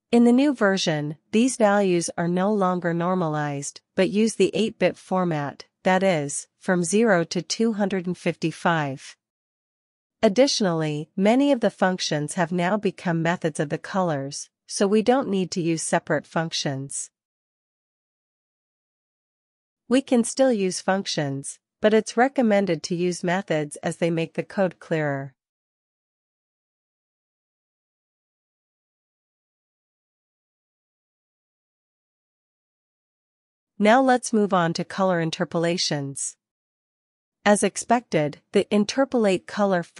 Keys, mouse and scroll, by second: 1.4 alt+q, 2.3 alt+shift+f, 3.0-5.2 typing, 7.3-8.1 typing, 10.0 alt+f, 11.6 ctrl+l, 11.9 Up, 12.9 BackSpace, 13.0 BackSpace, 14.7 Return, 19.1 ctrl+b, 19.3 alt+q, 19.9 Escape, 20.2-21.7 typing, 23.8 Escape, 24.4-25.2 typing, 26.3-33.0 typing, 34.9 Return, 36.7-37.5 typing, 38.8-39.9 typing.